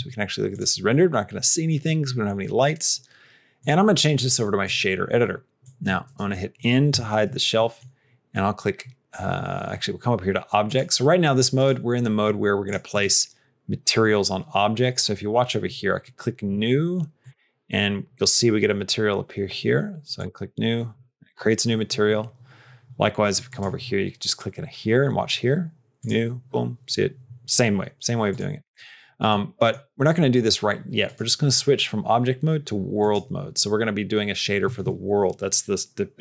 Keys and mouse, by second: 3.5-4.5 drag, 5.5 click, 6.9 n, 7.6 middle click, 10.5-11.6 drag, 12.8 click, 17.1 click, 20.0 click, 21.6 middle click, 25.8 click, 28.2 click, 29.1 middle click, 29.4 middle click, 31.1-33.1 drag.